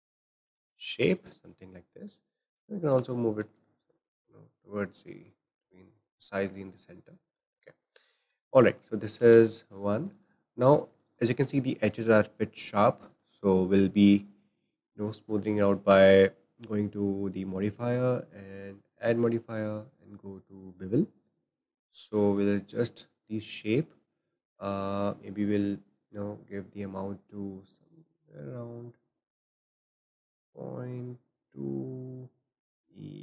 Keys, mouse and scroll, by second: 0.4 z, 0.7-1.7 drag, 3.0 g, 6.7-7.1 middle drag, 7.1 scroll down 5, 7.5-8.1 shift+middle drag, 8.1 scroll up 1, 8.3-8.7 drag, 9.2 alt+z, 9.4 click, 9.7-10.1 scroll up 3, 10.1-11.6 shift+middle drag, 11.6-12.0 scroll up 3, 12.0-14.0 shift+middle drag, 14.0 click, 14.3 click, 17.4 click, 18.3-21.2 drag, 21.2-21.8 scroll up 2, 21.8-25.2 shift+middle drag, 26.7-30.1 drag.